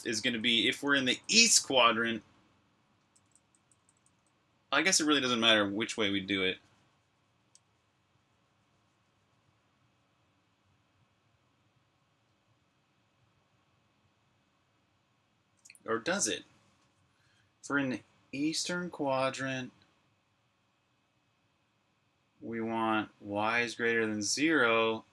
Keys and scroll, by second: 0.0-1.3 typing, 2.6-3.9 typing.